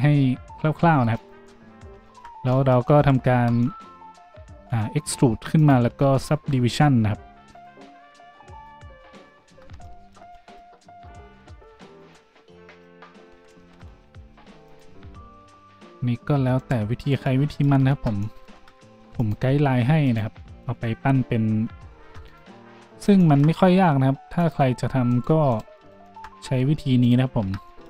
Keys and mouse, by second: 1.3 s, 3.2 a, 4.6-6.2 middle drag, 4.6 e, 5.9 Tab, 6.2-12.8 drag, 9.5 Tab, 11.3 a, 11.6 ctrl+r, 12.8 middle click, 13.3 ctrl+z, 13.8 ctrl+z, 14.3 ctrl+r, 17.9 Tab, 18.5 Tab, 18.9 ctrl+r, 22.0 ctrl+r, 23.4-24.5 middle drag, 23.6 a, 24.5-27.2 drag, 25.1 middle click, 25.1 right click, 25.5 shift+middle click, 25.5 shift+right click, 27.2-27.8 middle drag, 27.2 e, 27.4 Tab.